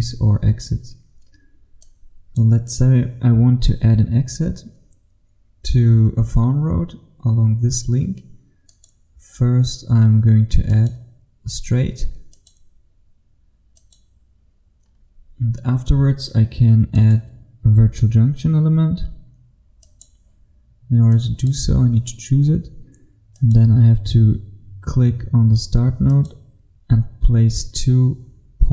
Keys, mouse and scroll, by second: 8.7 right click, 10.8 click, 11.6-12.4 scroll up 1, 12.4 click, 13.6 click, 15.0-17.0 scroll up 1, 17.0 scroll up 1, 17.0 right click, 19.9 click, 21.8-23.5 scroll up 1, 23.5 click.